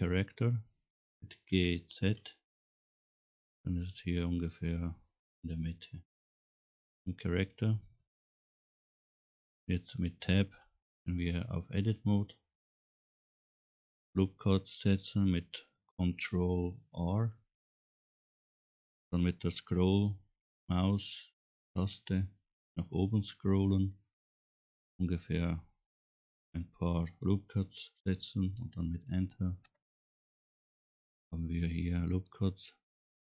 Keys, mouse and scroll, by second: 1.6 g, 5.5-8.1 middle drag, 8.7 scroll down 1, 9.2-9.5 scroll up 2, 10.5 Tab, 12.1 scroll down 1, 12.7 middle click, 17.6 ctrl+r, 31.1 middle click.